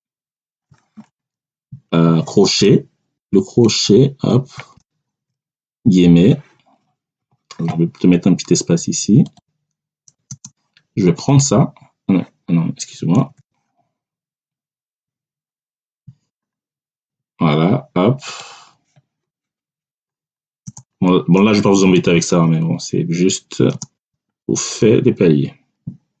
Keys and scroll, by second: 4.4 ctrl+alt+5, 5.8 3, 10.2 space, 12.8 BackSpace, 16.9 1, 20.5 space, 21.6 1, 22.2 3, 23.6 space, 23.9 /, 24.2 3.